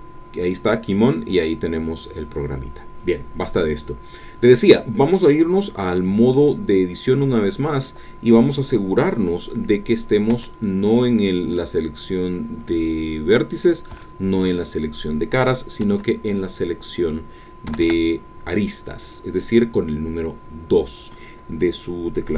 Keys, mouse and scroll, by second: 6.3-10.3 middle drag, 10.3 1, 13.9 3, 14.5-15.8 drag, 15.8 2, 17.7 a.